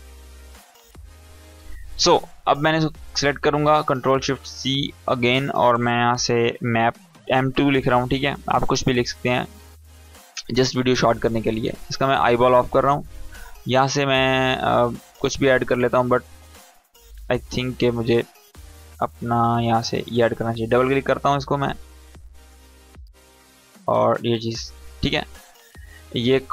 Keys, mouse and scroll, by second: 0.9 ctrl+z, 2.6 click, 4.4 ctrl+shift+c, 6.3 shift+m, 6.9 2, 8.5 click, 12.1 right click, 12.6 click, 20.3 click.